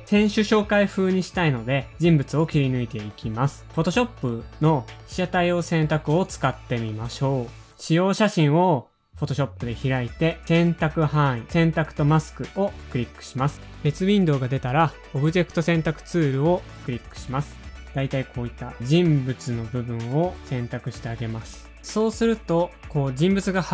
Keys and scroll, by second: 12.5 alt+super+r, 15.6 super+Tab, 15.6 alt+super+r.